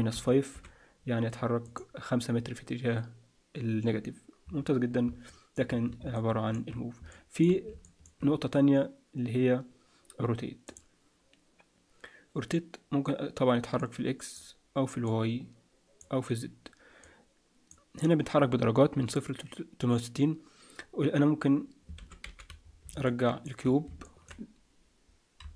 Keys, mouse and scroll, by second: 5.3 middle click, 6.1 shift+middle click, 7.1 middle click, 7.8 shift+middle click, 10.6 click, 15.0 click, 22.0 alt+r, 22.2 alt+g, 22.6-23.0 scroll down 5, 23.0 shift+middle click, 25.4 KP_Decimal.